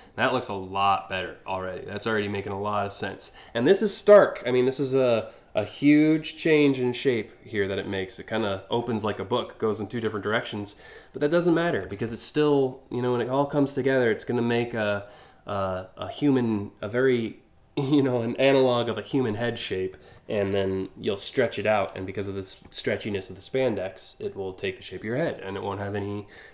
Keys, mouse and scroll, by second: 0.5 scroll down 2, 24.1 scroll down 1, 26.3 scroll down 1.